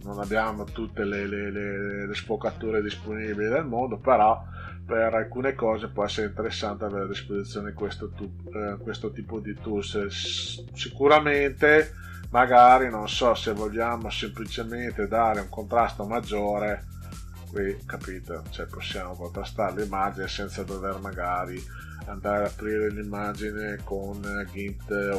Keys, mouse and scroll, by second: 4.9 click, 5.3 click, 6.8 click, 15.4 click, 16.5 click, 17.7-19.7 drag.